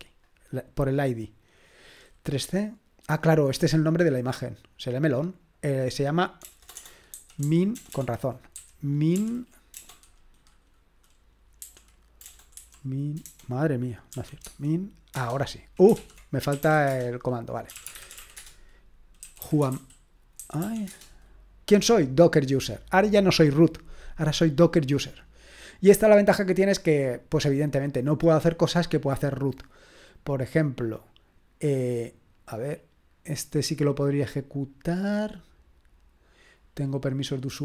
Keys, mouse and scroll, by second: 0.8 click, 4.8 click, 5.4 click, 5.7 click, 6.5-9.8 typing, 11.6 typing, 13.9-14.6 typing, 15.2 Return, 16.0 ctrl+p, 16.3-21.1 typing, 31.1-34.0 drag, 35.2 click, 36.4 click.